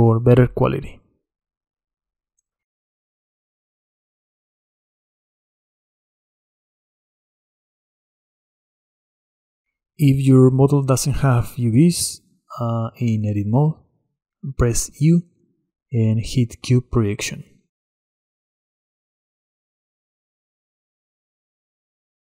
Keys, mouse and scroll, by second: 1.1-3.5 middle drag, 3.5 drag, 3.7-4.3 middle drag, 4.3-6.2 drag, 12.4 Tab, 14.3 u, 17.2 Tab, 18.0-20.0 middle drag, 20.0-22.2 drag.